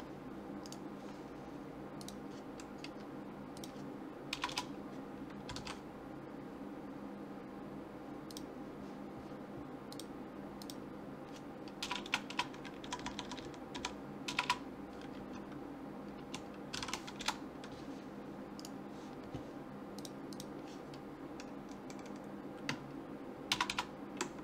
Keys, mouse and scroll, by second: 0.7 click, 1.9 BackSpace, 2.0-3.7 drag, 2.0 right click, 4.5 BackSpace, 9.9-11.7 drag, 12.0 BackSpace, 12.1 BackSpace, 13.0 Left, 13.1 Left, 13.4 Left, 14.4 BackSpace, 18.6 right click, 20.0-21.6 drag, 23.7 BackSpace.